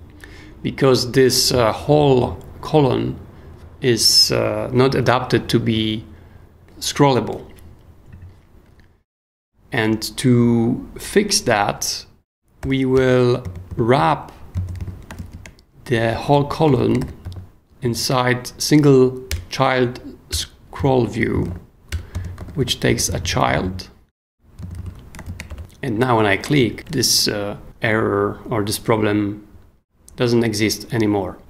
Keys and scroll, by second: 12.6 i, 12.9 Return, 13.4 super+Return, 13.5 super+Escape, 13.7 k, 14.0 o, 14.5 super+o, 14.8 super+k, 15.2 shift+a, 16.5-17.8 typing, 19.3 Return, 20.3 Return, 21.1-23.6 typing, 22.4 super+j, 24.6 super+d, 24.8 k, 25.3 shift+a, 25.5 shift+BackSpace.